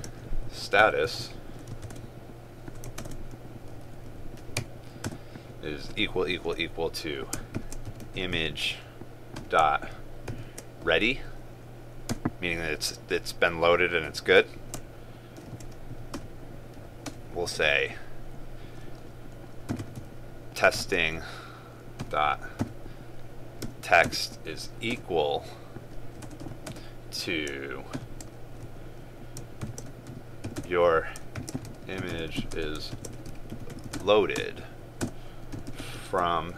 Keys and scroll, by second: 1.9 ctrl+space, 3.1 ctrl+space, 20.8 ctrl+space.